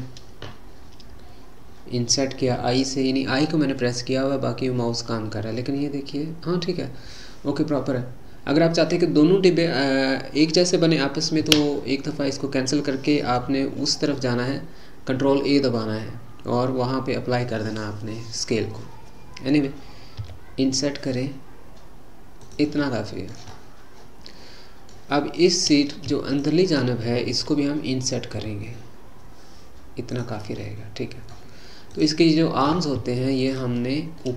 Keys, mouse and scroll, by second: 22.8-25.4 middle drag, 25.4 click, 26.3 shift+click, 30.6-31.9 middle drag, 31.9 click, 33.5 shift+click, 34.2-34.3 middle drag.